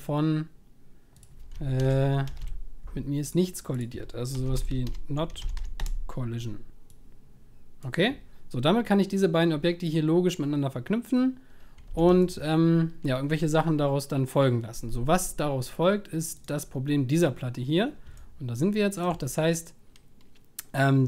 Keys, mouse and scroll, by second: 7.8-9.0 drag, 11.9 ctrl+s.